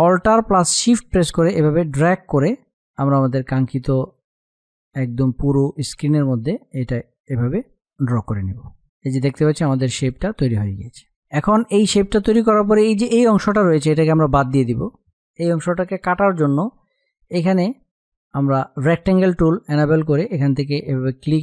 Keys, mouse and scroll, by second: 0.8 alt+shift+click, 8.4 space, 9.7 click, 10.7 space, 11.1 click, 17.4-21.4 drag.